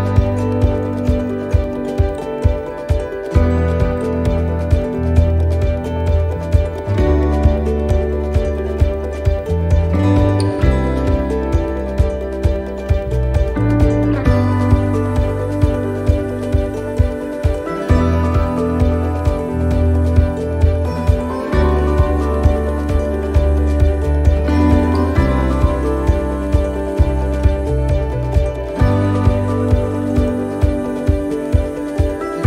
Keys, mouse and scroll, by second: 2.0-2.4 scroll down 2, 3.5-4.0 scroll down 2, 4.1 shift+middle click, 4.5 scroll down 2, 5.6 right click, 7.1 shift+d, 8.9 click, 11.6 click, 13.0 shift+middle click, 13.4-13.9 scroll up 7, 14.5 scroll up 1, 15.0 click, 16.6 s, 18.4-18.9 scroll down 2, 20.6 click, 23.8 shift+d, 25.6 click, 30.3 click, 31.3 click.